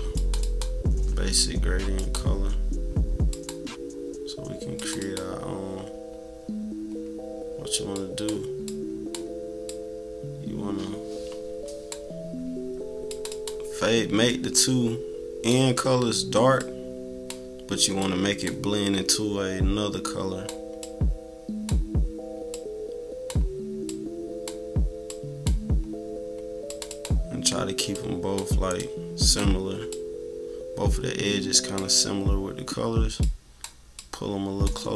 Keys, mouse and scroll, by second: 1.9 click, 3.3 click, 4.7 click, 5.0 click, 7.9 click, 8.6-13.2 drag, 13.2 click, 14.5-17.3 drag, 18.0 click, 19.0-20.4 drag, 20.8 click, 22.5 click, 23.9 click, 25.0-26.8 drag, 26.9 click, 27.9-29.5 drag, 29.9 click, 33.2 click.